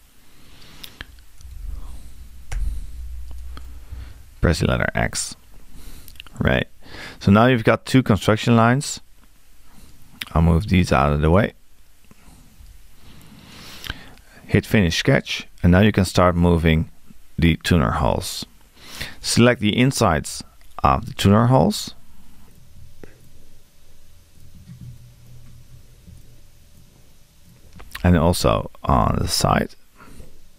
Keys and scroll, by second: 1.4 2.